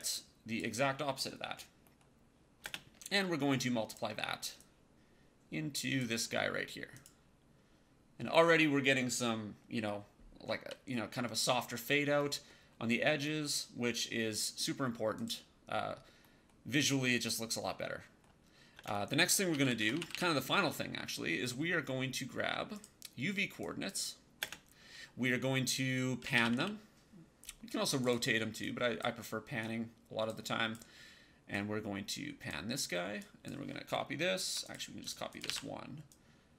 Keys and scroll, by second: 2.5 space, 18.6-20.5 typing, 24.3 space, 25.9-26.8 typing, 35.4 ctrl+d.